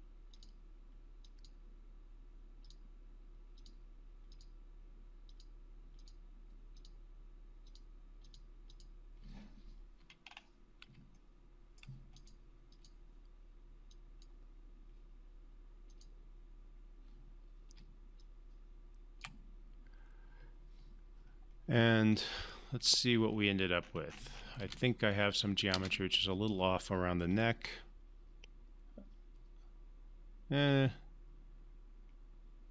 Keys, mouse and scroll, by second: 10.0-10.8 alt+scroll up 1, 11.1-12.0 alt+middle click, 12.1-14.5 drag, 17.8-19.4 typing, 18.2 click, 22.1 click, 23.3 scroll down 1, 23.8-24.6 scroll up 1, 24.6 space, 27.4-32.7 alt+drag.